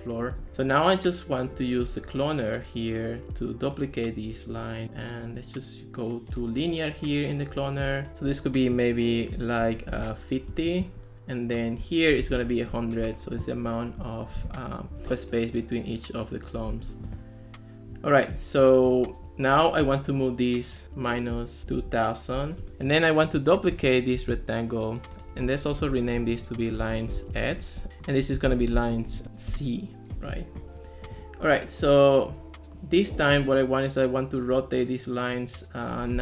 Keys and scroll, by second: 10.0 5, 10.5 Return, 11.9-12.8 typing, 15.1 ctrl+s, 16.8 ctrl+x, 20.8-22.4 typing, 22.7 Return, 24.2 super+d, 25.7-27.2 typing, 27.6 Return, 28.3-29.5 typing, 29.5 Return.